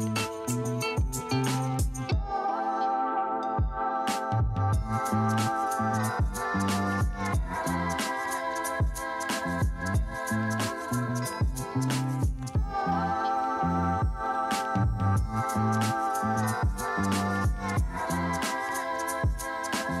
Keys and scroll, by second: 2.7 space, 5.7 space, 7.6 space, 8.9 space, 17.0 Escape, 17.8 ctrl+space, 18.4 ].